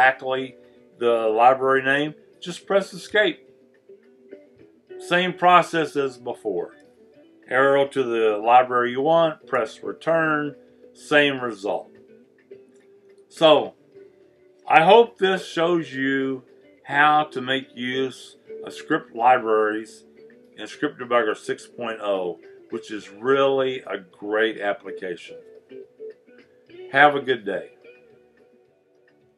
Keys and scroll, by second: 6.8 Down, 9.5 Return.